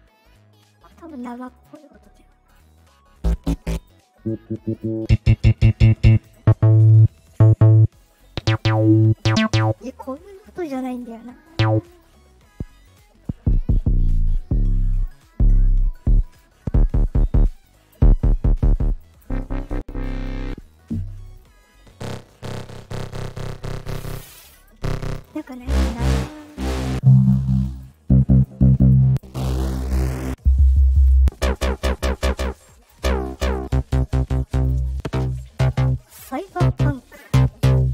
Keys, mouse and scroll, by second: 1.5 click, 2.4 click, 3.7 click, 4.7 click, 6.1 click, 8.0 click, 10.8 click, 11.8 click, 12.8 click, 14.9 click, 15.7 click, 16.2 click, 17.5 click, 18.8 click, 19.8 click, 21.2 click, 24.3 click, 25.0 click, 26.4 click, 27.5 click, 27.7 click, 28.6 click, 29.8 click, 30.8 click, 32.3 click, 33.2 click, 34.4 click.